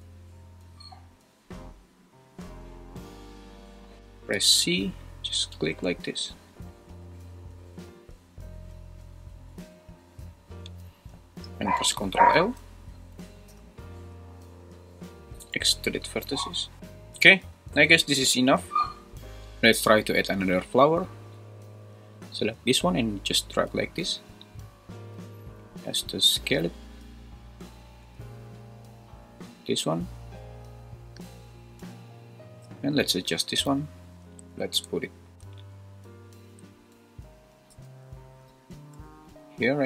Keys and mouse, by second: 4.3 c, 11.3 Escape, 12.3 l, 13.5 ctrl+l, 15.4 x, 16.6 g, 17.5 Escape, 18.7 `, 25.2 s, 27.2 click, 28.0 g, 31.2 click, 32.8 click, 33.6 /, 34.2 `, 37.8 `, 39.2 r.